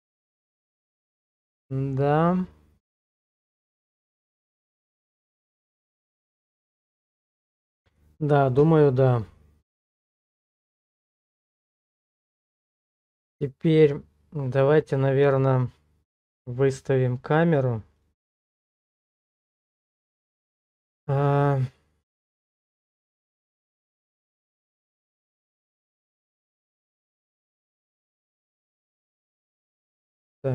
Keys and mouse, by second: 20.5 click, 21.8 click, 27.9 click.